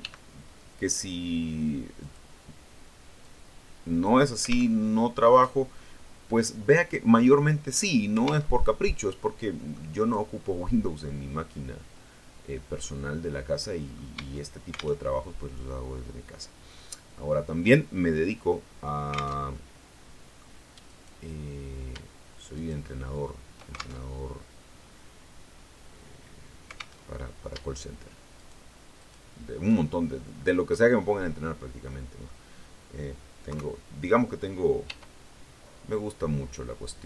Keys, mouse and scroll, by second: 1.9 click, 3.1 click, 4.6 alt+Tab, 8.4 alt+Tab, 9.1 middle click, 9.9 right click, 10.7-14.0 middle drag, 14.0 Tab, 19.2 alt+Tab, 19.4 alt+click, 19.6 middle click, 20.7 right click, 22.4 shift+right click, 23.8 alt+shift+Tab, 26.8 alt+Tab, 28.2 shift+right click, 28.8 shift+right click, 30.0-32.3 middle drag, 33.4 KP_3, 34.7 e.